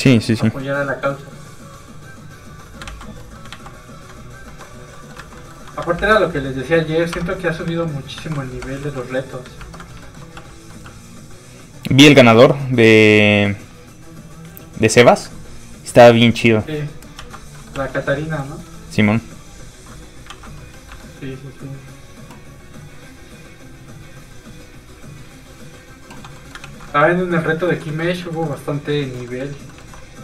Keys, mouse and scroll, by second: 0.1 a, 1.0 click, 2.9 ctrl+z, 3.2 middle click, 3.3 middle click, 3.5 ctrl+z, 4.4 shift+z, 4.5 shift+middle click, 5.0 middle click, 5.1 middle click, 5.2 alt+a, 5.5 middle click, 6.0 ctrl+Tab, 6.4 middle click, 6.8-7.2 scroll up 1, 7.2 Tab, 7.7 a, 8.3 alt+a, 8.6 Tab, 8.9 shift+middle click, 9.2 middle click, 9.3 middle click, 9.6 ctrl+Tab, 10.1 shift+middle click, 10.4 shift+f, 10.5 click, 10.7 middle click, 12.1 f, 12.3 click, 17.2 ctrl+z, 17.6 middle click, 17.7 middle click, 17.8 f, 17.9 click, 18.2 middle click, 18.7 f, 18.8 click, 20.3 ctrl+z, 20.6 middle click, 20.7 middle click, 20.8 scroll down 1, 20.9 shift+middle click, 22.0 shift+click, 23.1 click, 26.4 middle click, 26.7 ctrl+s, 27.0 middle click, 27.5 shift+scroll down 1, 27.7 shift+middle click, 27.9 middle click, 28.0 middle click, 28.8 shift+middle click, 28.9 shift+middle click, 29.2 middle click, 29.3 middle click.